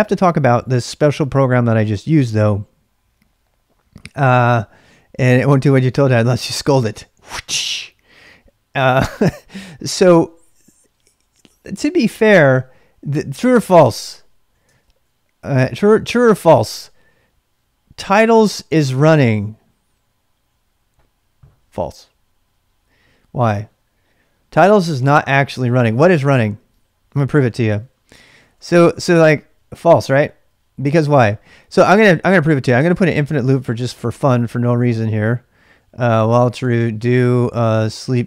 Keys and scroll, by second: 14.7 ctrl+[, 14.8 k, 16.1 Return, 27.1-29.1 typing, 30.8 Return, 31.6-34.6 typing, 36.2-38.2 typing.